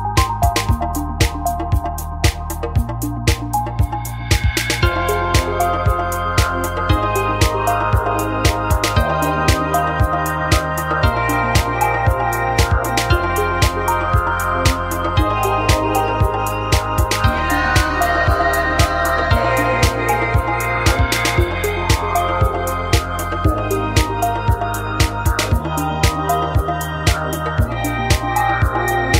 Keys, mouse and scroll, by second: 1.6-2.6 drag, 2.3 x, 3.5-5.4 drag, 5.3 f, 5.4 a, 18.3 click, 19.0 f, 19.1 a, 20.9-22.2 right drag, 22.2 e, 24.2-25.6 drag, 24.2-25.6 right drag, 26.0 right click, 26.7 e, 28.4 click.